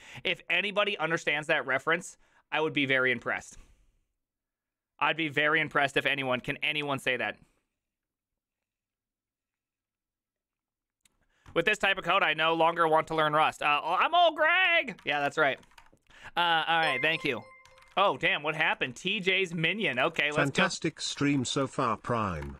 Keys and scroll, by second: 15.0-16.2 typing, 17.7 Tab, 17.9 ctrl+c, 18.0-22.5 typing.